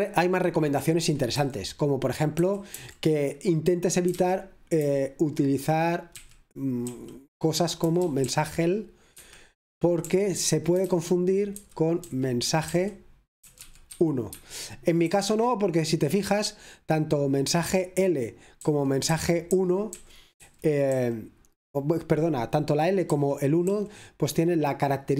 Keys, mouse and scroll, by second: 1.1 Escape, 2.4 typing, 3.9-4.8 typing, 6.0-15.6 typing, 9.2 Escape, 14.3 Escape, 18.7 typing, 22.1 typing, 23.2 typing, 25.1 typing.